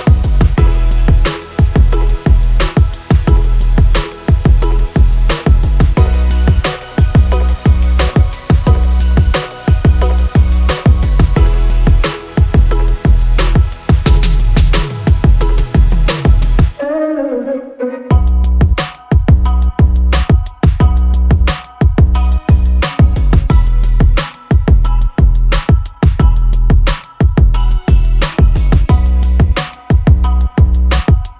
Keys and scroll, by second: 3.9 space, 11.4 Delete, 13.2 Delete, 14.3 Delete, 19.0 Delete, 23.4 Delete, 24.8 e, 28.1 space, 28.3 Escape, 29.8 space.